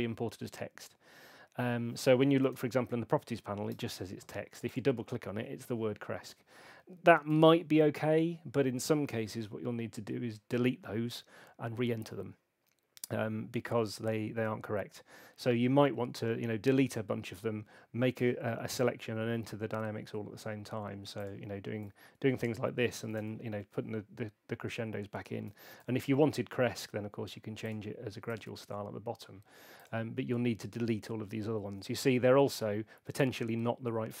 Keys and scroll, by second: 2.4 super+8, 6.3 Escape, 7.3 super+8, 25.8 super+8.